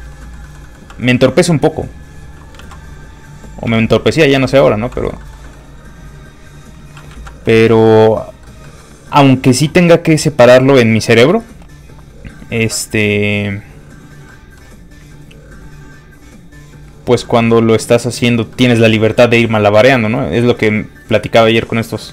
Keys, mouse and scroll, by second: 0.0 middle click, 0.4 shift+middle click, 0.6 middle click, 0.7 middle click, 0.9 f, 1.0 click, 2.6 ctrl+z, 3.0 f, 3.2 click, 3.7 f, 4.9 middle click, 5.2 shift+middle click, 6.4 click, 6.4 middle click, 7.1 ctrl+z, 7.6 shift+middle click, 7.9 middle click, 8.0 middle click, 10.8 click, 14.3 middle click, 15.2 click, 17.2 middle click.